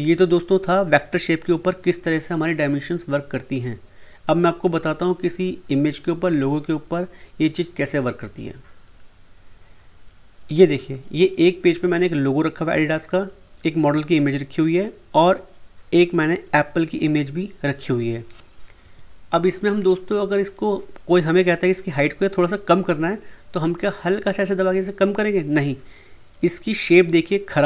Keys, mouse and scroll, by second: 8.9 click, 18.8 F2, 19.3 click, 19.3 click, 23.8-26.7 drag.